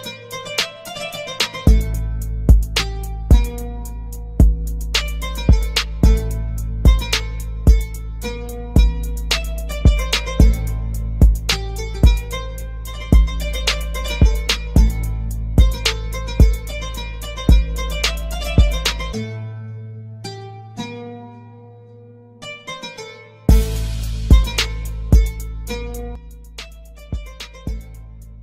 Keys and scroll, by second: 8.1 space, 14.2 Escape, 15.6 shift+Page_Up, 18.6-25.8 typing.